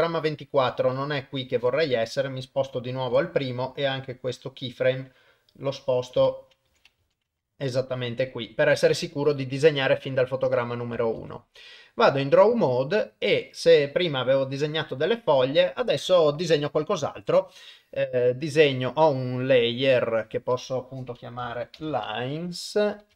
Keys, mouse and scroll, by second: 0.8 shift+Left, 1.8 click, 3.1 g, 11.2 ctrl+Tab, 16.5-17.9 drag, 20.2-23.1 drag, 23.0 BackSpace.